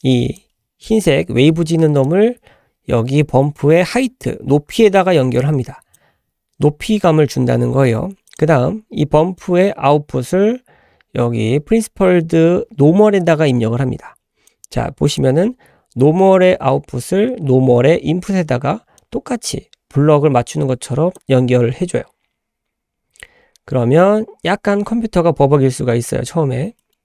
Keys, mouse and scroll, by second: 2.0-6.0 drag, 8.3 click, 9.4-15.2 drag, 19.0-21.3 drag, 22.0 l, 25.2 scroll down 1, 26.1-26.8 scroll down 3, 26.8 middle click.